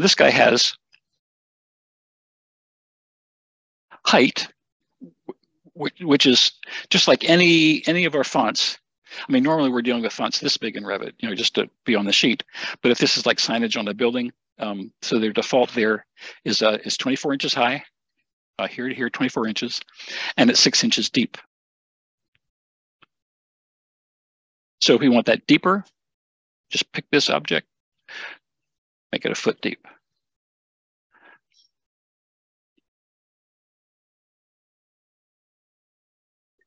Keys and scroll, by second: 30.0 1.